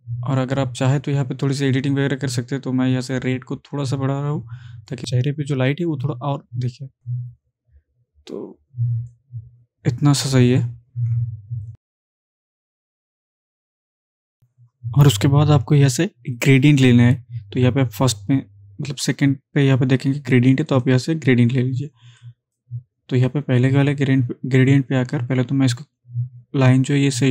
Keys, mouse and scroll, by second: 3.1-5.0 drag, 6.6-7.6 drag, 16.4 click, 20.7-22.9 drag.